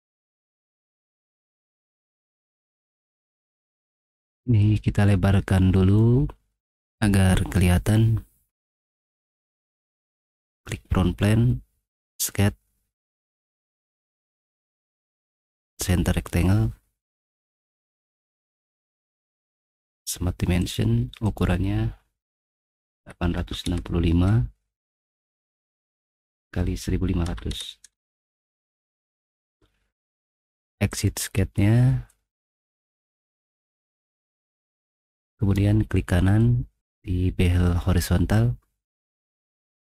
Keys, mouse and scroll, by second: 0.0 click, 1.1 middle click, 2.2 middle click, 4.2-6.0 drag, 6.7 middle click, 9.1 click, 10.6 click, 12.0 click, 13.3-14.7 drag, 17.5 click, 18.2 click, 19.5 click, 20.6 click, 21.2 click, 22.7-24.7 typing, 25.6 click, 26.1 click, 27.0-28.2 typing, 29.5-30.0 scroll down 1, 30.0 typing, 32.2-34.1 middle drag, 35.6 middle click.